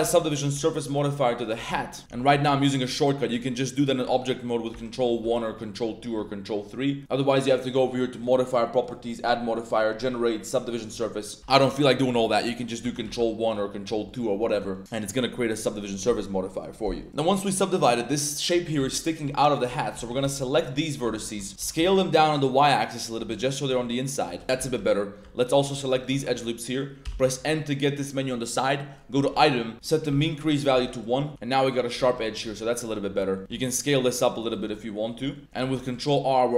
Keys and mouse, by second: 0.0 ctrl+2, 0.3 drag, 0.7 ctrl+3, 1.3 drag, 1.7 ctrl+z, 2.0 Tab, 2.3 Tab, 2.6 click, 4.7 ctrl+1, 5.0 ctrl+2, 6.0 ctrl+3, 8.1 click, 8.9-10.6 drag, 11.4 ctrl+2, 11.4 click, 12.8 ctrl+1, 13.0 ctrl+2, 14.0 drag, 14.6 Tab, 14.7 click, 14.8 Tab, 16.9 drag, 17.1 Tab, 18.5 Tab, 18.8-21.8 typing, 21.1 drag, 21.4 shift+middle click, 23.0 click, 23.3 Tab, 23.3-23.6 drag, 23.9 drag, 23.9 a, 24.3 a, 24.4 click, 24.4 Tab, 24.6 2, 25.4 alt+click, 25.9 alt+shift+click, 27.0 n, 29.9 click, 30.7 Tab, 30.9 middle click, 31.3 Tab, 31.3 middle click, 32.2 middle click, 32.2 1, 32.5 shift+middle click, 32.8 middle click, 33.2 z, 33.3 middle click, 33.4 z, 33.8 s, 34.4 click, 34.7-35.4 Tab, 34.7-35.0 middle drag, 35.3 middle click, 35.6 ctrl+r.